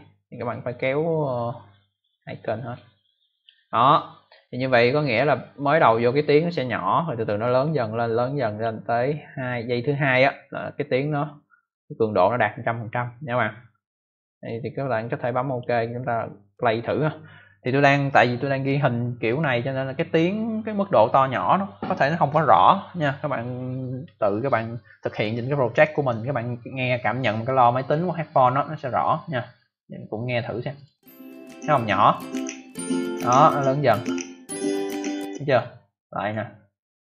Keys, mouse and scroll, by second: 0.4 click, 7.5 click, 15.4 click, 16.4 click, 30.7 click, 34.9 click, 35.8 click.